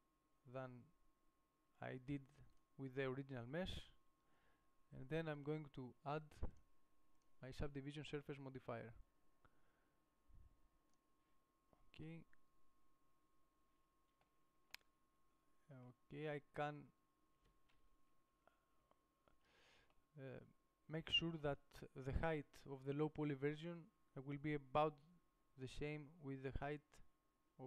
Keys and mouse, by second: 3.2-5.2 drag, 11.3-12.6 middle drag, 13.5 middle click, 14.5 middle click, 15.5 middle click, 16.5-18.5 middle drag, 18.5 KP_1, 19.2 KP_5.